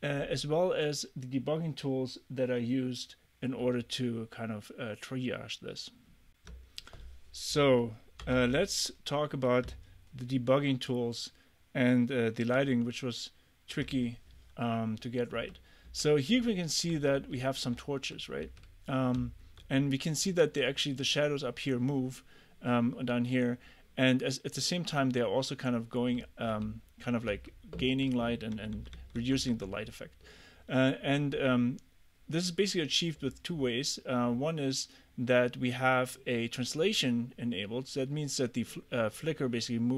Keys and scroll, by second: 8.0-8.9 typing, 12.6 super+Tab, 15.4-19.2 typing, 26.2 a, 28.6 w.